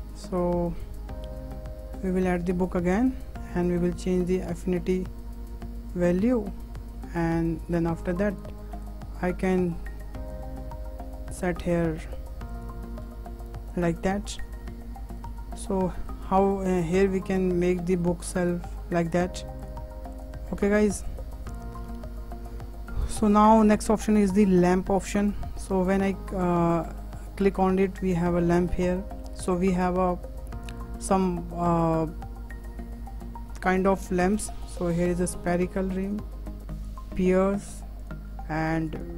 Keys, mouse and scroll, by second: 2.0 click, 2.6-3.9 shift+middle drag, 3.9 click, 7.7 click, 8.0 click, 8.8 click, 10.3 click, 11.7 `, 11.9 `, 13.0-13.4 scroll up 5, 13.7 click, 14.7-15.1 scroll down 5, 15.3-16.9 middle drag, 16.9 click, 17.8-18.2 middle drag, 18.2-18.5 scroll up 3, 18.5-18.8 scroll down 3, 18.8-19.2 middle drag, 19.0 `, 19.2 `, 20.5-21.1 scroll down 5, 21.1 click, 22.0 Delete, 22.2 Delete, 25.1-26.1 drag, 26.1-26.6 scroll up 5, 26.6 shift+middle click, 27.2-27.7 scroll up 5, 27.7-30.6 shift+middle drag, 30.6-33.8 drag, 36.0-39.1 drag.